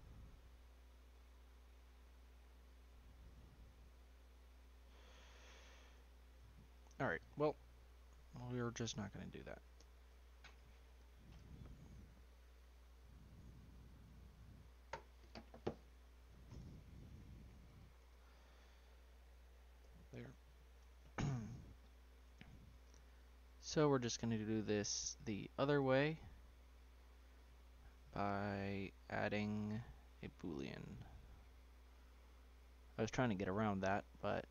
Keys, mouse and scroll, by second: 3.7 click, 5.7 click, 7.9 ctrl+z, 9.8 Delete, 11.2 ctrl+right click, 11.5 ctrl+z, 16.5 BackSpace, 17.6 click, 18.7 click, 19.8 Delete, 20.7 Tab, 21.4-21.8 scroll down 2, 21.8 click, 22.2 Tab, 23.8-25.2 middle drag, 25.2 click, 29.5 Tab, 30.9-33.6 drag.